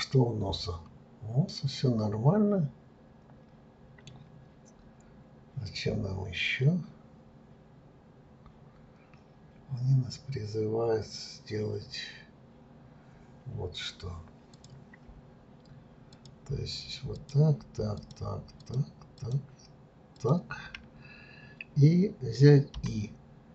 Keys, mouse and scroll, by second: 1.4-4.5 middle drag, 4.9-5.7 scroll up 1, 5.7 scroll up 1, 14.5-16.2 drag, 17.1 shift+click, 17.9 shift+click, 18.6 shift+click, 19.1 shift+click, 20.1 shift+click.